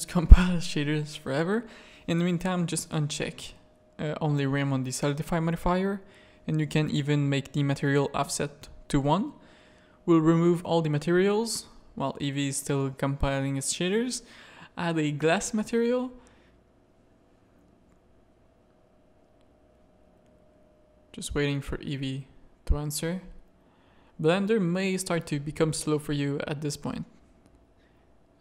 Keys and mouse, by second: 1.9 click, 7.3 click, 10.0 click, 10.3 click, 10.5 click, 11.5-12.0 middle drag, 13.0-28.1 drag.